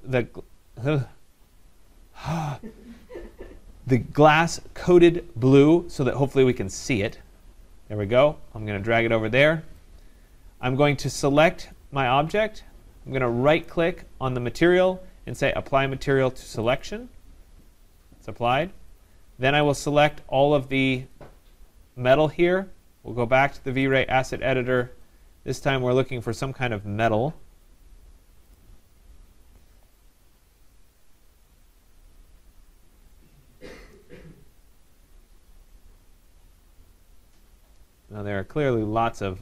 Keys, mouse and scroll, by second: 7.1-8.5 drag, 10.6 click, 12.2 click, 13.7 right click, 16.8 click, 19.0 click, 19.8 click, 21.2 click, 24.0 click, 25.6 click, 26.5-27.6 scroll, 28.6 click, 30.6 middle click, 30.7 middle click, 31.3 middle click, 31.4 middle click, 31.6 middle click, 33.1 middle click, 33.8 middle click, 33.9 middle click, 34.5 middle click, 34.9-36.0 scroll, 36.0-37.4 scroll, 37.4-38.3 scroll, 38.4-39.4 scroll.